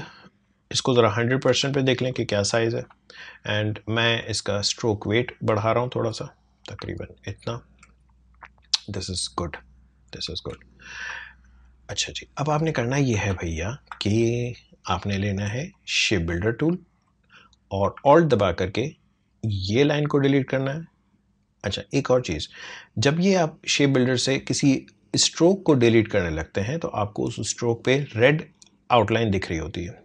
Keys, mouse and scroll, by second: 1.3 ctrl+1, 2.1 space, 2.4 click, 2.6 space, 4.1 click, 6.9 alt+scroll up 1, 9.4-10.2 alt+scroll down 1, 10.6 space, 10.7 click, 11.1 space, 11.9 click, 12.7-13.1 alt+scroll up 1, 13.3 space, 13.4 click, 13.8 space, 15.7-25.7 drag.